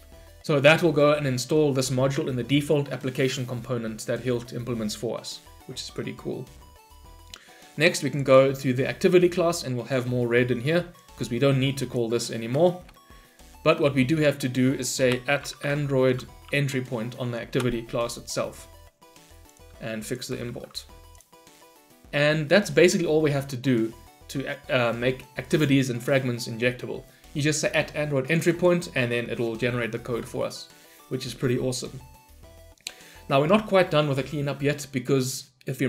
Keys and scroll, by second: 17.6 Return, 19.5 Return, 20.4 Return, 20.4 ctrl+y.